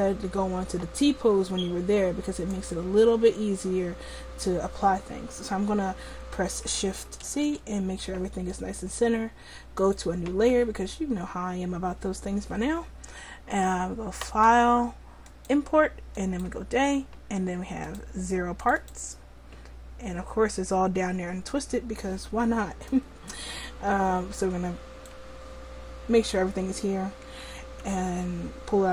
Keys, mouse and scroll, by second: 2.6-7.3 drag, 7.3 shift+c, 9.8-14.3 drag, 19.8-24.8 drag.